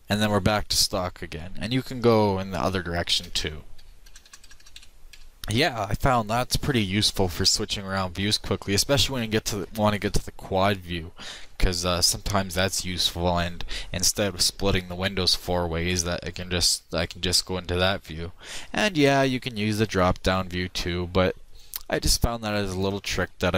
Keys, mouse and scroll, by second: 3.9 ctrl+Right, 4.3-4.9 ctrl+Right, 5.2 ctrl+Right, 19.9-21.7 drag.